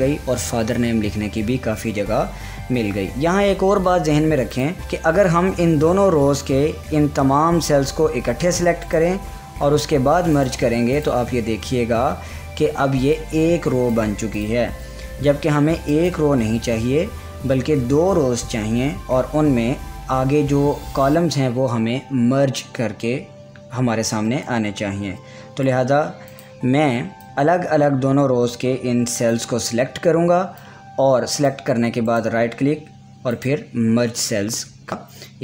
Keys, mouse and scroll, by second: 2.2 click, 2.5 ctrl+z, 4.6-8.9 drag, 8.9 right click, 10.4 click, 13.2 click, 13.6 click, 24.6 click, 25.0 ctrl+z, 26.3-32.1 drag, 32.1 right click, 33.4-35.4 drag.